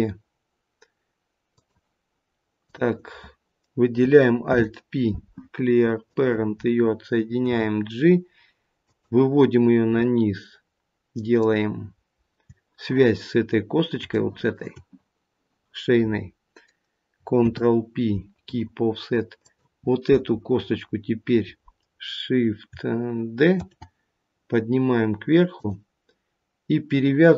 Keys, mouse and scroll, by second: 2.6 click, 4.4 alt+p, 7.4 g, 11.3 shift+click, 13.5-14.0 scroll up 3, 14.2 shift+middle click, 17.3 ctrl+p, 19.3 click, 23.5 shift+d.